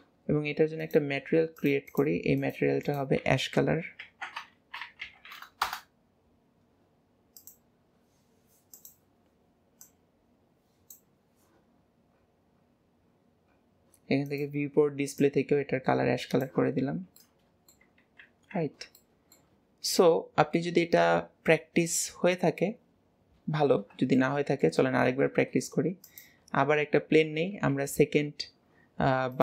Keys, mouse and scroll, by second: 0.9 click, 1.9-5.9 drag, 8.8 click, 11.7 scroll, 12.3 scroll, 12.8-13.6 scroll, 13.6-14.3 scroll, 14.3 click, 16.8-17.2 scroll down 3, 17.3-18.3 middle drag, 18.3 ctrl+s, 19.0-25.3 shift+middle drag, 25.3 shift+a, 27.5 KP_7, 28.6 scroll down 2.